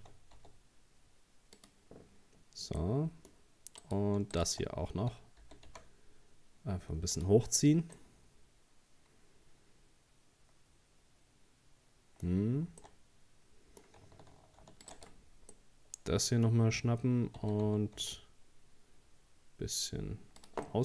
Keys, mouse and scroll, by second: 2.8-3.8 middle drag, 3.8 right click, 4.3 shift+right click, 5.4 g, 7.3 Tab, 7.5-8.0 scroll down 3, 8.0-11.1 middle drag, 12.3 scroll up 2, 12.7 Tab, 12.8-14.6 middle drag, 14.6 ctrl+r, 15.5 scroll up 1, 15.5-17.4 middle drag, 17.4 s, 20.7-20.8 middle drag.